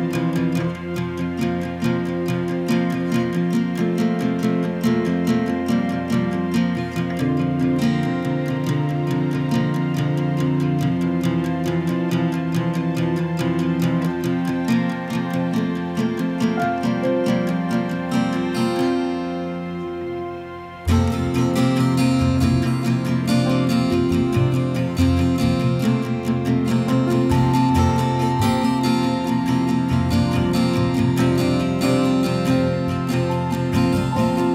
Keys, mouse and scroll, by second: 0.5 click, 0.9 right click, 2.2 click, 6.1 click, 8.2 click, 14.8 click, 15.4 ctrl+click, 16.3 click, 28.8 click, 29.7 click, 30.9 ctrl+click, 31.9 click, 33.8 ctrl+click.